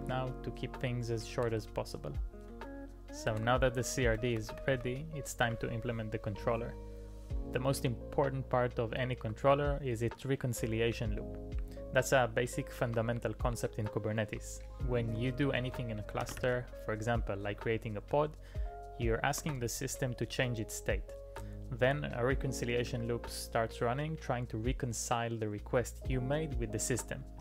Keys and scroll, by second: 1.5 ctrl+d, 3.3 ctrl+d, 4.0-5.4 typing, 6.9-7.7 typing, 8.0 alt+a.